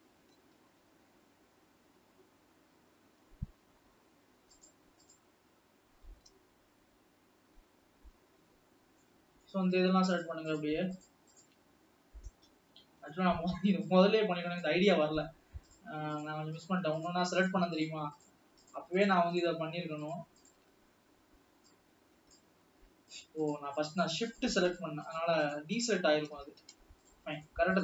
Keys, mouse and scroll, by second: 2.1 scroll down 1, 6.4 g, 8.7 scroll down 1, 9.1-10.4 middle drag, 10.5 shift+click, 11.5 shift+click, 11.7-12.4 scroll down 3, 12.4 KP_7, 13.2 scroll down 1, 13.9-16.0 drag, 16.9 shift+click, 17.5 shift+click, 18.0 shift+click, 19.1 shift+click, 19.4-19.8 shift+drag, 20.5 shift+drag, 20.9-21.6 scroll up 3, 21.7-23.4 drag, 23.6 shift+click, 24.4 shift+click, 25.7-26.2 shift+drag, 26.6 ctrl+z, 27.2 shift+click.